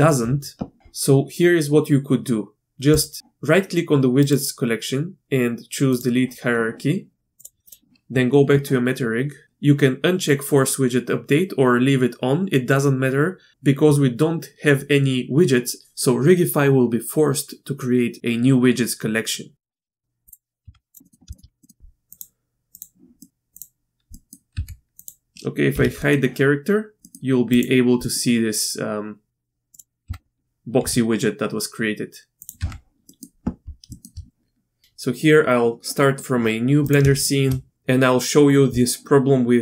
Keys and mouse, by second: 3.0 click, 4.2-6.3 drag, 7.4 click, 9.4 ctrl+z, 19.6 click, 19.7 click, 19.9 shift+middle click, 20.3 click, 20.6 Tab, 20.9 click, 21.0 middle click, 21.3 shift+middle click, 21.6 middle click, 21.8 z, 22.1 click, 22.7 click, 23.2 middle click, 24.1 click, 24.5 Tab, 25.0 click, 25.2 Tab, 25.7 h, 26.0 click, 27.0 click, 28.0 click, 30.0 Tab, 30.8 s, 32.4 click, 32.6 Tab, 33.0 click, 33.9 shift+drag.